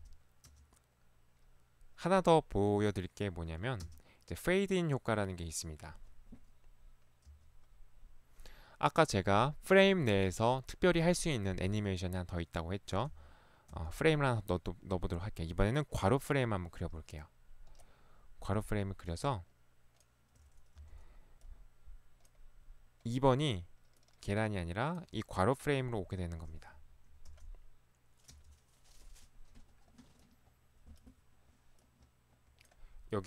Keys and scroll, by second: 0.0 space, 0.5 space, 3.9 space, 7.3 space, 13.1 f, 13.8 f, 20.8 p, 26.9 Escape, 27.3 space, 28.4 space.